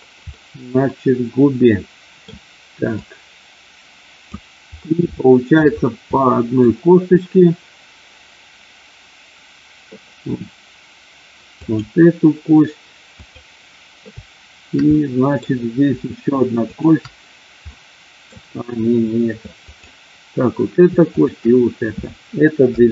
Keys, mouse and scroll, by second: 0.3-2.3 middle drag, 2.9-4.3 drag, 5.0 shift+middle click, 6.0 middle click, 11.6 click, 14.9 middle click, 17.6 middle click, 19.7 click, 21.1 shift+click.